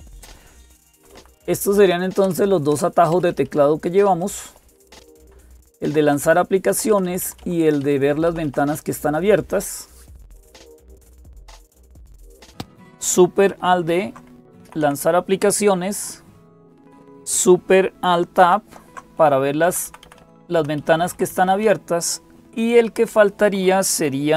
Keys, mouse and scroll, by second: 0.0-24.3 typing, 0.7 Right, 0.9 Right, 2.0 Return, 2.5 Return, 2.9 Up, 3.1 Up, 3.2-4.8 Up, 4.8 Right, 4.8 Return, 5.6 Down, 7.2 Down, 8.0 Down, 8.2 Down, 12.5 Down, 12.5 Up, 13.3 Up, 13.3 Escape, 13.3 alt+s, 15.9 alt+super+d, 18.2 Escape, 18.2 Down, 19.8 alt+super+Tab, 20.0 Down, 20.6 Down, 20.8 Down, 20.9 Down, 21.1 Down, 21.1 Up, 22.6 Up.